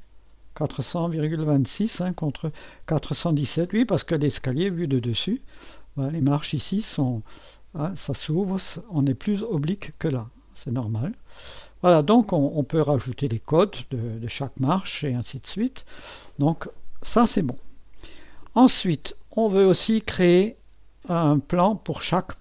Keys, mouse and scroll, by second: 1.3 middle click, 1.8-2.3 scroll down 2, 4.4 click, 5.2 click, 5.4 middle click, 6.6-8.0 drag, 11.6-12.8 drag, 14.9-17.3 scroll down 2, 19.9-22.4 drag.